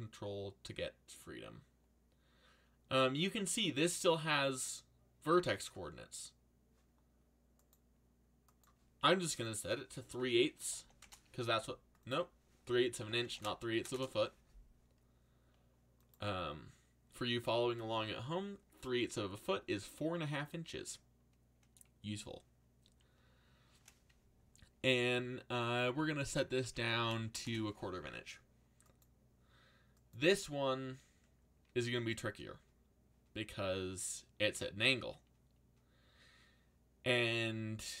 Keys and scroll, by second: 10.3-11.3 typing, 12.7-14.2 typing, 25.7-27.7 typing.